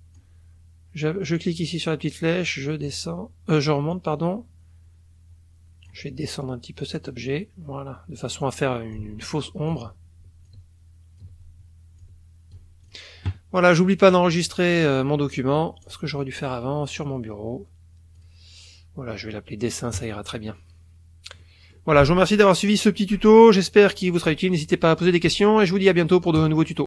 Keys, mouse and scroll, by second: 1.6-3.0 drag, 3.9-6.1 drag, 7.0 click, 8.9 click, 10.5 shift+click, 12.0 shift+click, 12.9 shift+click, 14.0 click, 15.8 click, 18.2 click, 19.9 click, 21.4 click, 26.4 click.